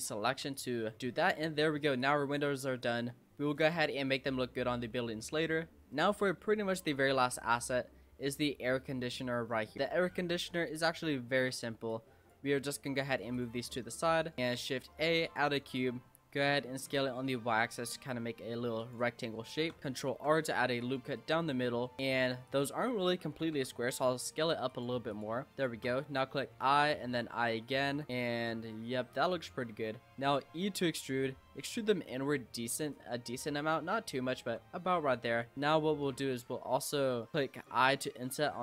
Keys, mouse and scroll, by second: 0.3 Tab, 0.5 click, 0.8 scroll down 3, 1.0-2.0 middle drag, 2.0 click, 2.8 click, 3.7 click, 4.3-4.7 scroll down 4, 4.7-5.0 middle drag, 5.0-5.4 scroll down 4, 5.4-6.0 scroll up 3, 5.4-5.7 middle drag, 6.0-7.6 middle drag, 7.6-7.9 scroll up 2, 7.9-9.1 middle drag, 9.1-9.7 scroll down 11, 9.7 click, 10.1-11.6 shift+middle drag, 11.6 scroll up 1, 11.9 click, 12.8 click, 13.3 click, 13.6-13.9 scroll up 3, 13.9-14.3 shift+middle drag, 14.3 shift+a, 15.6 Tab, 15.9-16.4 scroll up 2, 16.4 s, 19.3 shift+middle click, 19.8-20.1 scroll up 3, 20.1 ctrl+r, 22.0 click, 22.9 l, 23.5 s, 25.1 click, 25.5 shift+click, 26.4 i, 28.6-29.2 scroll down 7, 29.2-30.4 scroll up 10, 29.3 middle click, 30.4 e, 33.0 Tab, 33.4-35.5 middle drag, 35.5 Tab, 35.6 click, 35.9-37.5 middle drag, 37.5 click, 37.9 i.